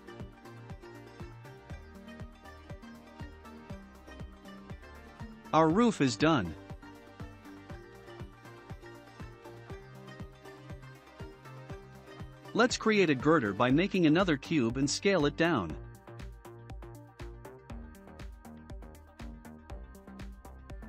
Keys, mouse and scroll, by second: 3.7 click, 4.3-5.0 scroll down 1, 5.0-10.1 shift+middle drag, 5.0 scroll down 4, 10.1 click, 11.2 shift+a, 15.4-17.6 drag, 17.6 s.